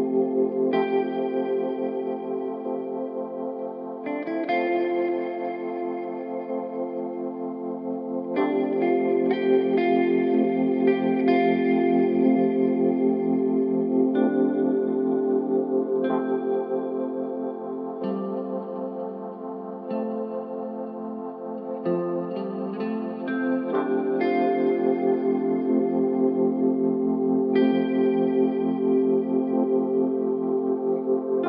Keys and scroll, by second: 2.9 k, 4.7 -, 5.1 Return, 11.2 k, 12.9 9, 13.1 Return, 14.8 ctrl+z, 19.3 k, 20.7 9, 20.9 Return, 21.7 1, 24.7 3, 27.8 ctrl+z, 30.4 4, 31.2 3.